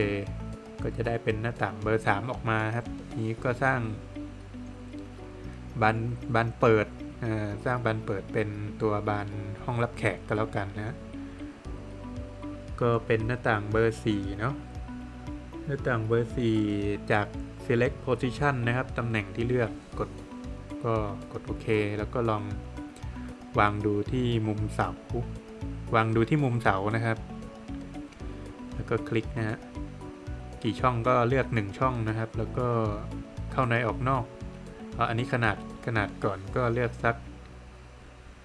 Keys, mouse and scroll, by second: 0.2 Escape, 0.4 middle click, 2.5 click, 6.9 click, 12.4 click, 13.1 click, 13.8 click, 21.6 click, 27.1 click, 31.0 Return.